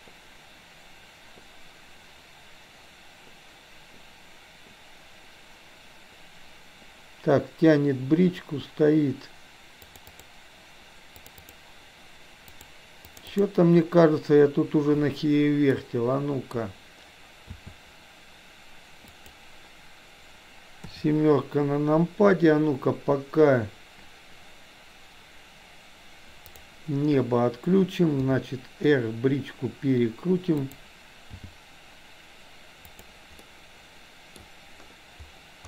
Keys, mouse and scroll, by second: 15.8-16.6 middle drag, 17.7 s, 20.8 KP_7, 26.6 click, 28.2 r, 31.5 g, 33.5-34.5 middle drag.